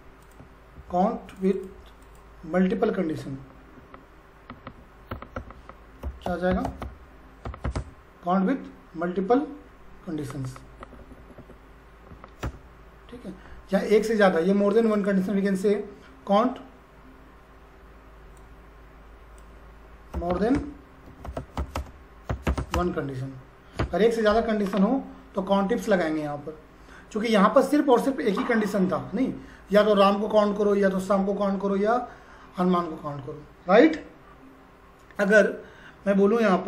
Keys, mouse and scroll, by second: 0.2 click, 0.7 ctrl+v, 1.3 click, 3.7 \, 6.2-8.2 typing, 12.4 Return, 14.7 click, 18.3-20.2 drag, 19.9-23.0 typing, 23.7 Return, 27.9 click.